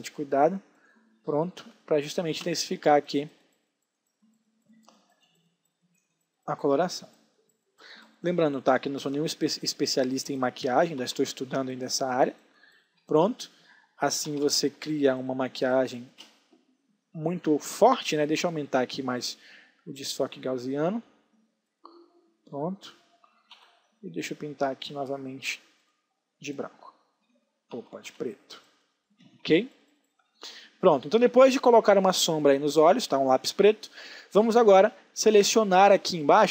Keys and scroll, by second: 1.3 space, 10.5 ctrl+alt+z, 12.9 space, 14.3 ctrl+alt+z, 14.8 space, 23.1 x, 27.3 ctrl+z, 28.1 x, 29.4 space, 34.7 space.